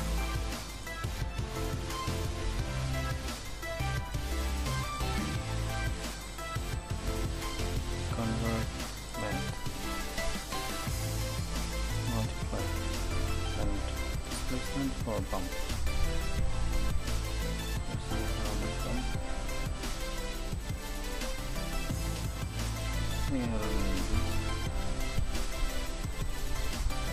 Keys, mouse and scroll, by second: 4.4-6.1 drag, 6.5 shift+a, 10.5-27.1 drag.